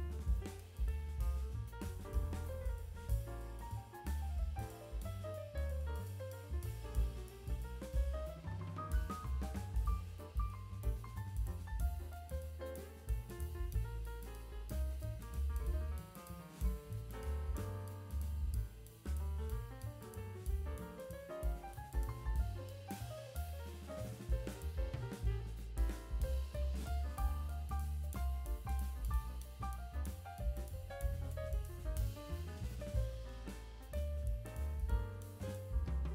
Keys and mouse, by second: 0.8 shift+middle click, 1.5 click, 2.3-5.5 typing, 2.6 click, 3.1 click, 3.3 click, 3.7 click, 4.5 click, 5.0 click, 5.3 click, 5.6 click, 5.9 middle click, 6.9 click, 7.0 g, 7.5 click, 7.5 z, 7.7 KP_7, 8.3 middle drag, 8.8-11.7 typing, 9.6 middle click, 11.3 middle click, 11.9 click, 12.5 click, 12.7 middle click, 13.1 KP_0, 13.3 ctrl+s, 15.2-17.7 drag, 18.3 KP_0, 19.2 click, 20.2 shift+click, 21.2-23.1 drag, 23.3 click, 24.6-25.7 drag, 26.5 ctrl+s, 27.7-30.0 drag, 30.2 click, 30.8 click, 31.7 click, 32.1 ctrl+s, 32.6 click, 33.5-35.7 drag.